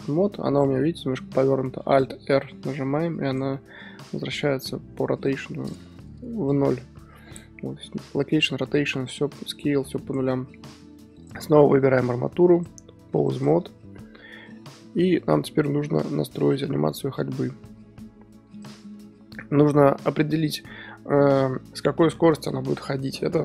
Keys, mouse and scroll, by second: 0.8-2.4 middle drag, 2.4 alt+r, 3.3 click, 3.5-5.7 middle drag, 6.5 n, 9.7 n, 10.1 Left, 11.2 Left, 13.4 Left, 13.4-14.3 drag, 14.3 scroll down 1, 14.5-23.4 middle drag.